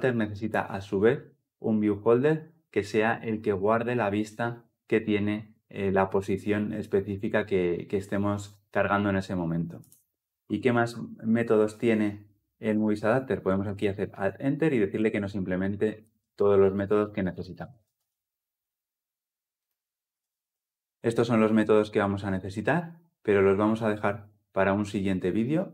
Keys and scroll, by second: 10.6 alt+Return, 17.2 shift+Down.